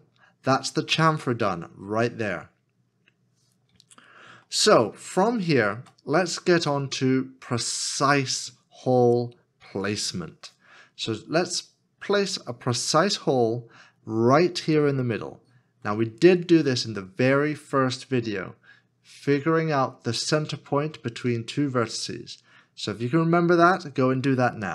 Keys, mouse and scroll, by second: 2.5 Return, 2.5 scroll down 1, 4.5 shift+middle click.